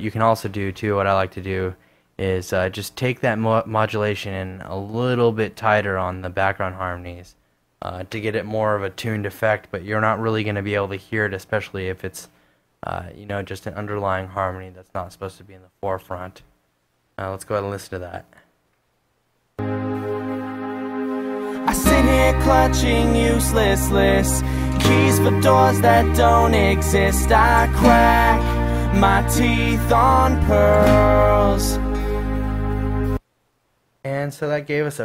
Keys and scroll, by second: 15.6 super+Tab, 33.4 space.